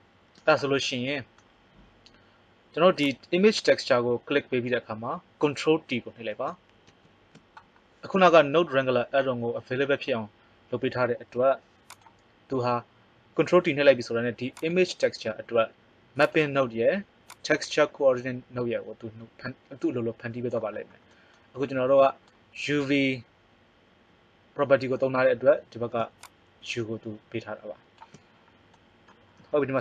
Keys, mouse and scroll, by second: 3.0 click, 6.9 ctrl+t, 11.3 g, 16.2 right click, 26.1-27.9 drag.